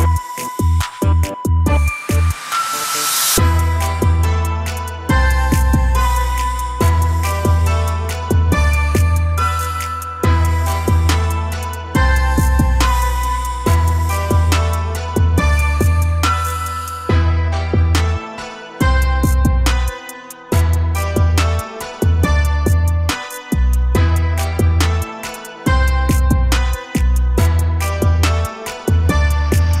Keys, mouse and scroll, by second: 5.6 click, 7.7-9.3 drag, 10.8 click, 12.8-13.9 drag, 14.9-17.9 drag, 22.1 a, 22.2 a, 24.9-29.8 drag.